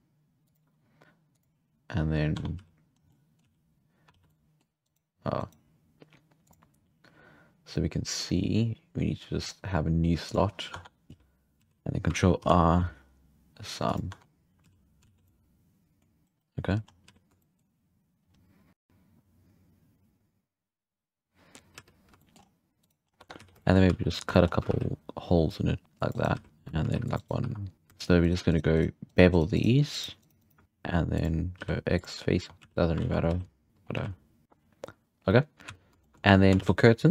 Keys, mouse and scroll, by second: 1.3-2.3 drag, 2.3 Tab, 2.6 z, 2.9 scroll down 1, 3.1-3.5 middle drag, 3.4 z, 4.1 alt+a, 4.3-4.9 middle drag, 4.9 right click, 5.4 right click, 6.4-10.8 drag, 10.8 Tab, 11.1 z, 11.6 z, 12.4 ctrl+i, 13.8 drag, 14.1 Tab, 14.6 z, 15.1 alt+a, 15.2 scroll down 1, 15.3-16.2 middle drag, 16.8 scroll up 5, 17.0 z, 17.4 shift+middle click, 18.3-18.9 scroll up 5, 21.7 z, 22.2 shift+middle drag, 22.4-22.8 scroll up 1, 22.8 right click, 23.0 scroll up 1, 23.2 Tab, 23.4 z, 23.7-24.1 shift+middle drag, 24.1 scroll down 1, 24.3 shift+middle click, 24.5 scroll up 1, 24.7 ctrl+r, 26.4 z, 26.5-26.8 right drag, 26.8 ctrl+r, 27.4 2, 27.7-30.6 shift+right drag, 30.6 ctrl+b, 31.6 x, 32.3 Tab, 32.5 drag, 32.6 z, 33.0 alt+a, 33.3 z, 33.7-34.1 scroll down 9, 33.9 z, 35.7 z, 35.8 scroll down 4, 36.0-37.1 shift+middle drag, 36.6 shift+a.